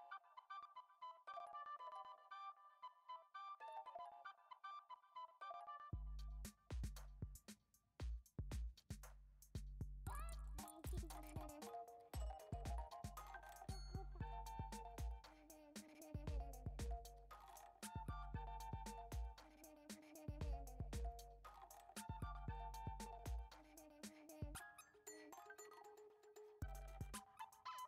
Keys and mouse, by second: 0.1 alt+e, 2.1 Tab, 2.8 s, 4.0 s, 5.5 ctrl+z, 6.3 g, 8.3 g, 9.3 g, 10.2 g, 11.5 shift+d, 13.4 s, 14.2 g, 15.6 shift+d, 16.7-20.4 typing, 22.3 shift+click, 22.6 shift+click, 23.7 ctrl+j.